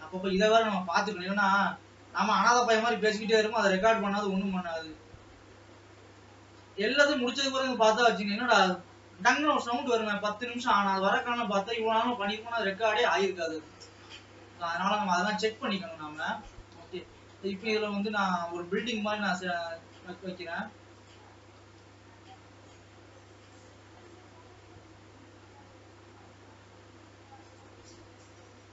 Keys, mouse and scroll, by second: 0.4 scroll up 3, 0.9 s, 3.3 scroll down 2, 3.6-5.2 middle drag, 5.2 shift+scroll up 2, 5.7 middle click, 6.2 scroll up 1, 6.5 g, 7.8 middle click, 8.7-9.6 scroll up 2, 9.6 s, 11.8 middle click, 12.4 s, 15.2-15.6 scroll down 2, 15.6-17.6 middle drag, 17.6-18.6 scroll up 2, 18.6 s, 21.7 g, 23.9-26.3 scroll down 2, 26.3-27.6 middle drag, 27.6 click.